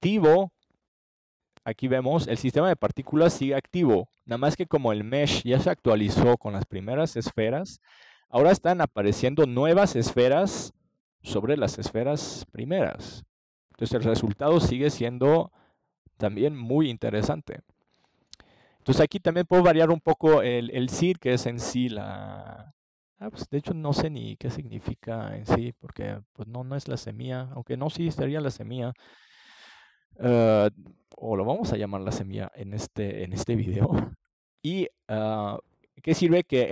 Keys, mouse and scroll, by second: 1.8-3.3 middle drag, 3.3-5.1 drag, 31.4 KP_0, 32.2 KP_Enter.